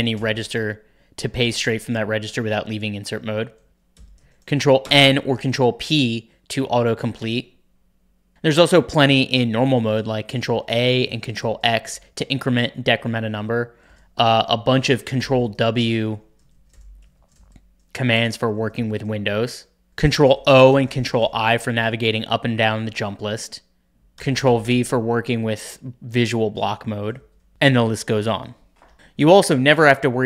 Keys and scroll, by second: 0.1 typing, 3.7 ctrl+w, 3.7 ctrl+[, 3.7 typing, 4.8 ctrl+n, 10.1 ctrl+a, 10.3 ctrl+a, 10.4 ctrl+a, 10.9 ctrl+x, 11.2 ctrl+x, 11.3 ctrl+x, 13.3 ctrl+w, 13.8 ctrl+v, 14.3 ctrl+w, 14.5 ctrl+l, 14.9 ctrl+w, 15.1 ctrl+h, 15.6 ctrl+w, 16.0-18.7 typing, 18.5 ctrl+w, 20.0 ctrl+o, 20.1 ctrl+o, 20.3 ctrl+o, 20.5 ctrl+o, 20.6 ctrl+i, 20.8 ctrl+i, 21.0 ctrl+i, 24.1 ctrl+v, 24.1-24.8 typing, 27.0-28.0 typing.